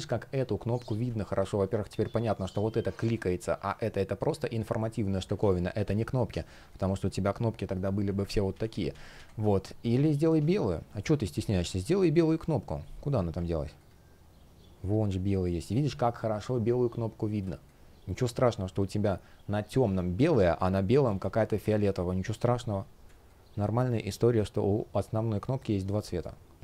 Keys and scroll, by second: 5.1 super+z, 8.0 super+z, 11.3 shift+x, 12.9 shift+x, 17.1 space, 20.0 space.